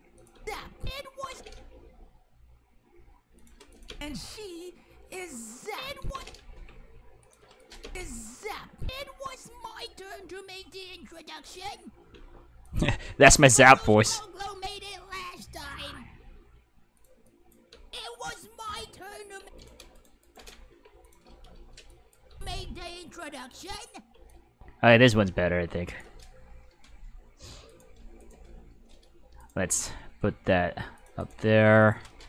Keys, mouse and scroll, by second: 0.1 click, 0.3 space, 1.3 space, 1.8 g, 3.4 click, 3.7 click, 3.9 space, 6.1 space, 6.5 g, 7.2 click, 7.6 click, 7.8 space, 10.2 middle click, 12.1 space, 12.6 click, 13.0 space, 16.1 space, 16.9 click, 17.3 click, 17.7 space, 19.4 space, 19.6 right click, 19.9 shift+right click, 20.2 shift+right click, 20.7 g, 21.0 click, 21.9 click, 22.3 space, 24.1 space, 24.3-26.0 drag, 26.9 k, 27.7 right click, 27.9 k, 28.2 right click, 29.4 right click, 29.6 g, 30.9 click, 31.2 right click, 31.4 g, 31.8 click.